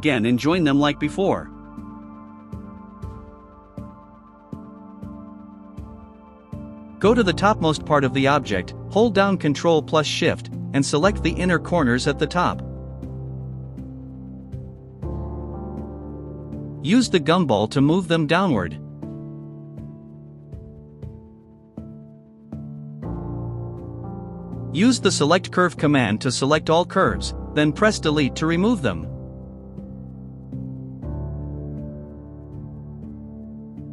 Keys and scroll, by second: 25.7-27.7 typing, 28.1 Return, 28.9 Delete.